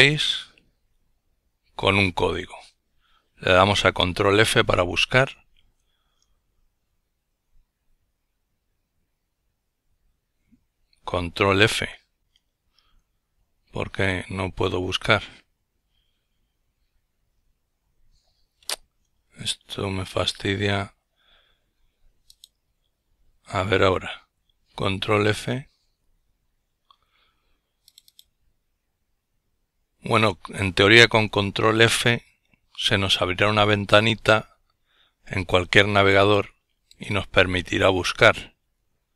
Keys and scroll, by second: 0.3 ctrl+f, 7.3 ctrl+f, 13.9 ctrl+f, 19.6 ctrl+f, 26.6 ctrl+f.